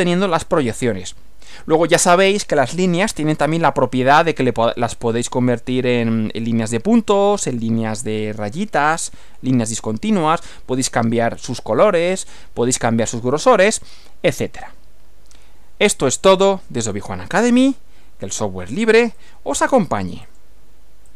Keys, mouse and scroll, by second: 19.2 click, 20.3 click, 21.1 click.